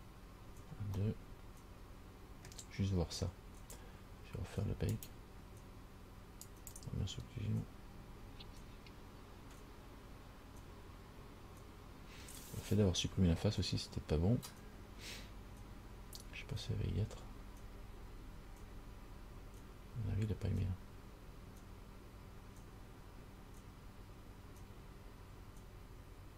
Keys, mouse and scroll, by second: 1.2 middle click, 5.2 click, 6.7 click.